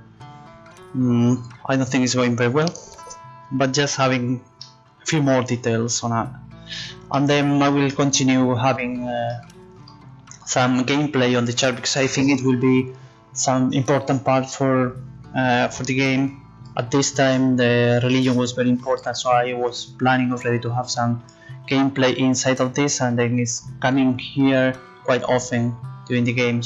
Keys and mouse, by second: 5.5-7.0 middle drag, 7.2 middle click.